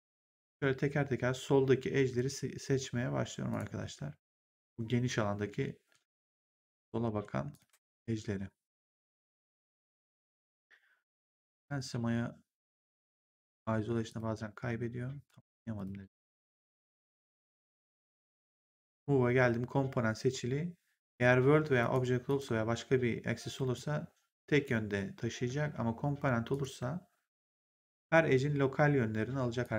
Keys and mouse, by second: 0.0 shift+click, 3.4 shift+click, 4.5 shift+click, 6.2 shift+click, 7.4 shift+click, 9.0 shift+click, 10.0 right click, 12.6 shift+click, 14.0 click, 15.7 click, 17.9 click, 21.7 click, 23.6 click, 25.6 z, 26.4 click, 27.5 click, 29.5 click.